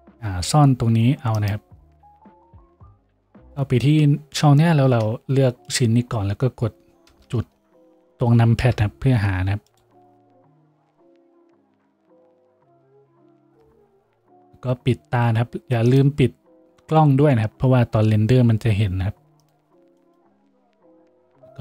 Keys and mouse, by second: 8.6 KP_Decimal, 9.8-13.5 drag, 13.5-21.6 middle drag, 13.5 KP_Decimal, 20.7 a, 21.5 a.